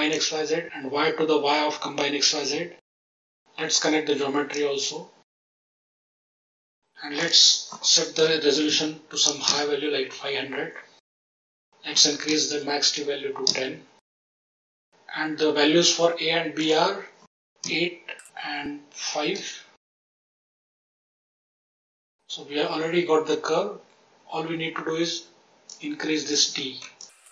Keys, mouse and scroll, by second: 0.1 click, 3.9-5.2 drag, 6.0 scroll up 1, 7.1-9.5 drag, 7.1-8.3 scroll up 3, 8.6 0, 11.3-13.5 drag, 16.5-19.9 drag, 20.7 click, 21.5-22.1 scroll down 10, 24.8-25.6 scroll down 2, 25.6 ctrl+click, 26.9 ctrl+click.